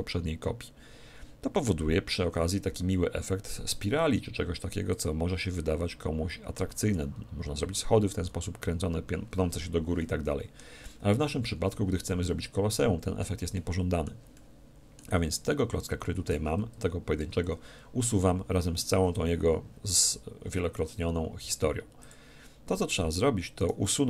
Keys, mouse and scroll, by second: 2.9-4.8 middle drag, 4.9-6.8 drag, 10.0-16.3 middle drag, 16.3 Tab, 17.2 Tab, 21.4 x, 23.6-24.0 right drag.